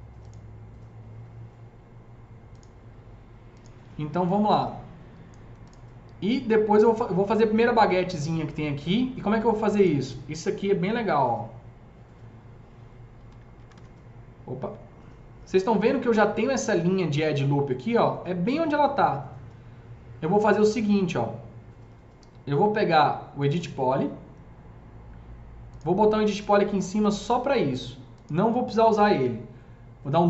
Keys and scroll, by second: 10.5 F3, 13.1 F3, 13.5 F3, 13.6 F4, 14.5 F3.